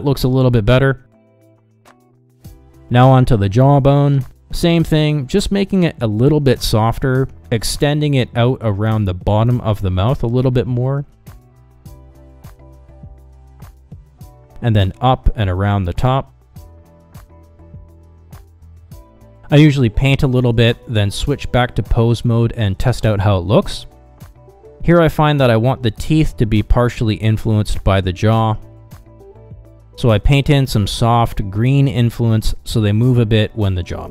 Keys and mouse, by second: 0.0 r, 3.2 ctrl+z, 3.9 ctrl+Tab, 4.8 shift+middle click, 6.6 click, 8.5 middle click, 8.8 shift+middle click, 9.2 shift+middle click, 9.5 middle click, 11.0 click, 11.3 click, 11.6 ctrl+middle click, 11.8 shift+middle click, 12.2 click, 12.9 middle click, 13.1 click, 13.9-15.0 drag, 15.0 KP_Divide, 15.5 click, 16.2 click, 16.4 click, 16.7 click, 17.0 click, 17.2 click, 17.4 click, 17.8 click, 18.2 middle click, 18.5 click, 18.7 click, 18.9 middle click, 19.3 click, 19.5 click, 19.7 click, 20.1 click, 20.2 middle click, 20.4 ctrl+z, 20.4 middle click, 20.8 ctrl+Tab, 22.4 middle click, 22.9 g, 24.4 middle click, 24.7 ctrl+z, 24.9 g, 29.2 ctrl+z, 29.6 middle click, 30.0 click, 30.4 ctrl+Tab, 32.2 middle click, 32.6 f, 32.9 f, 34.0 click.